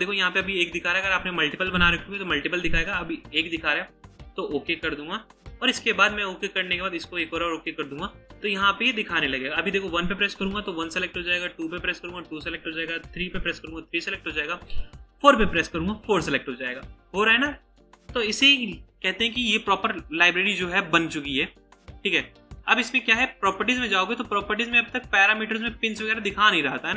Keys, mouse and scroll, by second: 24.7 scroll up 1.